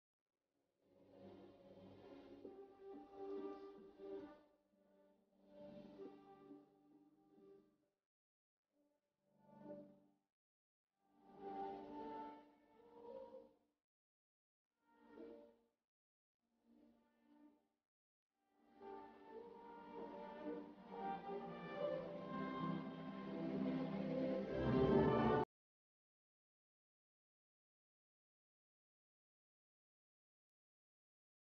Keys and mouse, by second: 2.0 right click, 2.0 s, 4.1 Tab, 4.4-13.9 middle drag, 14.2-16.1 middle drag, 16.1 Tab, 16.1-21.8 right drag, 21.8-26.1 middle drag, 26.1 ctrl+r, 26.1-27.4 right drag.